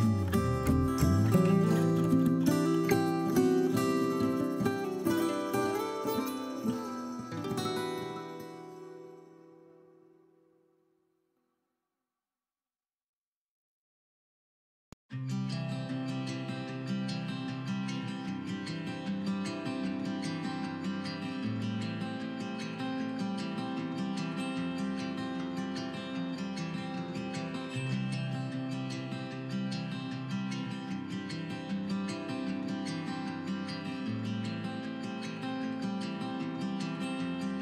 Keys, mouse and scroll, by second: 0.3 right click, 0.5-0.8 scroll up 1, 0.8 g, 1.1 click, 1.4 scroll down 1, 1.5 middle click, 1.8 scroll up 1, 1.9 middle click, 2.1 r, 2.9 click, 3.0 scroll down 1, 3.1 shift+middle click, 3.5 scroll up 1, 3.6 scroll down 1, 3.8 Tab, 3.9 scroll up 1, 4.1 middle click, 4.3 a, 4.5 middle click, 4.6-5.0 scroll up 1, 5.0 alt+click, 5.1-5.4 scroll down 1, 5.4 i, 6.6 click, 6.7-8.1 middle drag, 6.9 scroll up 2, 7.3 e, 8.1 click, 8.2-11.4 middle drag, 8.3 scroll up 2, 8.7 scroll down 2, 9.4 scroll up 2, 9.6 scroll down 2, 10.1 i, 11.4 click, 11.5 scroll down 1, 11.5-13.5 middle drag, 11.7 scroll up 1, 12.0 g, 13.5 click, 13.6-17.7 middle drag, 13.7 scroll up 1, 14.1 a, 14.5 ctrl+r, 15.5 click, 15.7 scroll down 2, 16.1-16.6 scroll up 4, 16.7 scroll down 2, 17.1 scroll up 2, 17.7 alt+click, 18.0-19.0 middle drag, 18.3 g, 19.2 middle click, 19.3 click, 19.4 scroll down 2, 19.5-22.2 middle drag, 20.0 scroll up 2, 20.4 scroll down 2, 20.6 Tab, 21.0 scroll up 2, 21.2-21.6 scroll down 4, 21.8 scroll up 2, 22.2 right click, 22.5 middle click, 23.2 click, 23.6-25.3 middle drag, 23.9 scroll down 2, 24.2 scroll up 2, 24.4-24.9 scroll down 2, 25.3-26.9 drag, 26.9-28.9 middle drag, 27.3 scroll up 2, 27.5-28.3 scroll down 2, 28.3 s, 28.9 drag, 29.0-31.9 middle drag, 29.2 scroll down 2, 29.4 scroll up 2, 30.8 scroll up 2, 31.3 s, 32.5 click, 32.7 middle click, 32.9 scroll down 1, 33.2 KP_1, 33.5 middle click, 33.5-34.0 scroll up 2, 34.0 g, 34.7 click, 34.8 middle click, 35.1 KP_3, 35.6 g, 36.1 click, 36.2 middle click, 36.4 scroll down 1, 36.4 middle click, 36.6 scroll up 1, 37.0 s.